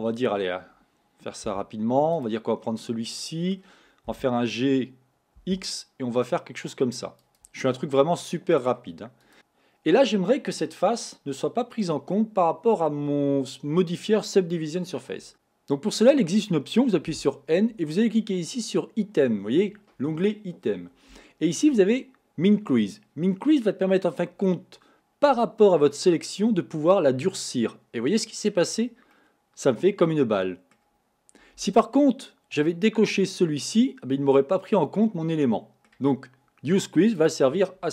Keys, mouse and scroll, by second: 1.5 3, 2.2 click, 2.6-3.2 scroll down 4, 3.2-4.2 middle drag, 4.2 g, 7.9-9.3 middle drag, 9.3 click, 15.3 n, 17.2 n, 26.7-29.1 drag, 29.1-32.1 middle drag, 33.4 click, 34.2-37.2 middle drag, 37.2 click.